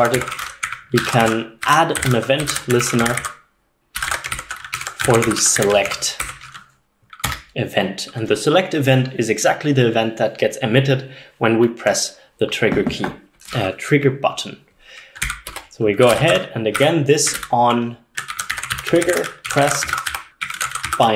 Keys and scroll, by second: 0.0-7.3 typing, 12.3 BackSpace, 15.8-21.1 typing.